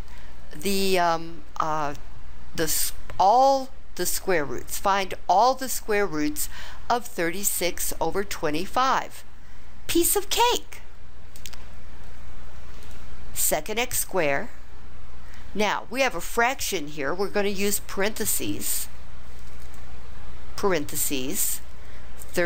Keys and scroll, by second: 19.6 (, 22.3 3.